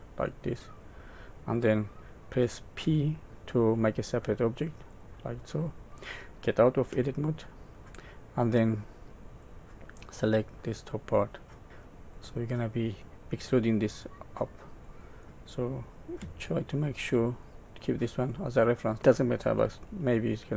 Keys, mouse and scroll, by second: 2.8 p, 6.9 Tab, 7.8 middle click, 9.4 click, 10.2 click, 10.6 middle click, 11.6 Tab, 11.6 middle click, 11.6-12.1 scroll up 2, 12.1 click, 14.4 middle click, 15.0-16.2 scroll down 2, 16.5 shift+middle click, 17.5-17.8 scroll up 1, 18.0 middle click, 19.8 shift+middle click.